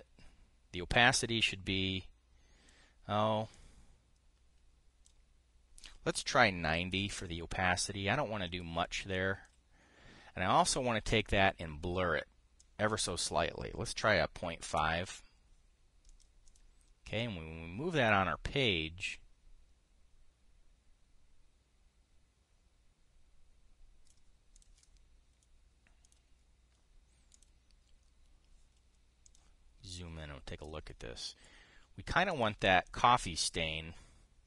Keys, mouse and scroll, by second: 7.4 KP_9, 7.5 KP_0, 7.8 Return, 9.9 click, 11.8 click, 13.3 click, 14.7 KP_Decimal, 15.1 KP_5, 15.4 Return, 16.8 click, 17.1 click, 17.9-24.9 drag, 25.3 click, 26.7 click, 28.0 click, 30.0 click, 30.6 click, 33.0 click, 33.5 click.